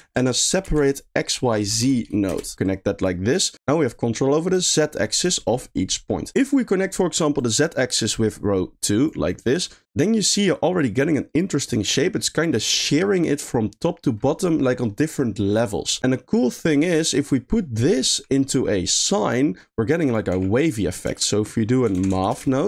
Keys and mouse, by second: 2.6 click, 2.8 drag, 3.3 click, 3.5 click, 4.6-5.2 drag, 6.1 middle click, 7.4-9.1 drag, 9.8 middle click, 10.4-12.2 middle drag, 12.5 middle click, 16.5 middle click, 19.6 middle click, 20.0 click, 20.3 g, 21.1 shift+a.